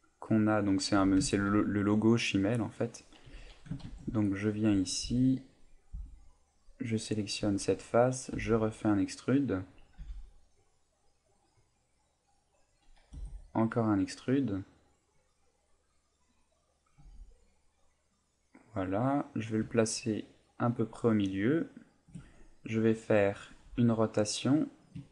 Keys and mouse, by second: 0.8 click, 1.0 a, 1.3 ctrl+r, 2.7 click, 3.2 a, 3.8 ctrl+Tab, 5.0 b, 5.9 b, 8.3 e, 9.8 click, 10.0 g, 12.8 click, 13.1 e, 16.7 click, 17.0 g, 22.1 shift+click, 23.6 r.